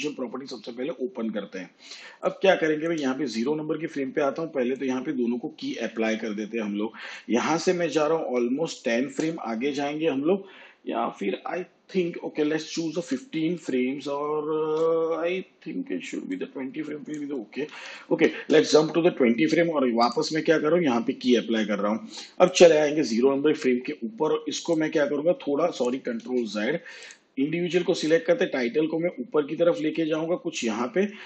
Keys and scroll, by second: 8.1 shift+Page_Down, 12.9 ctrl+Right, 17.7 shift+Page_Down, 26.2 ctrl+z.